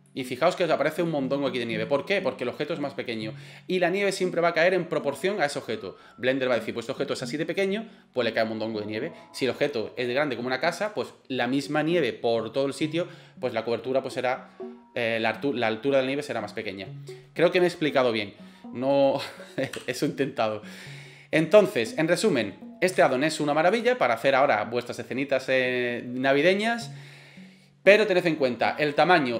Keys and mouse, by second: 0.1 middle click, 1.1-1.9 middle drag, 18.9 right click, 19.7 Delete, 22.2 right click, 23.0 s.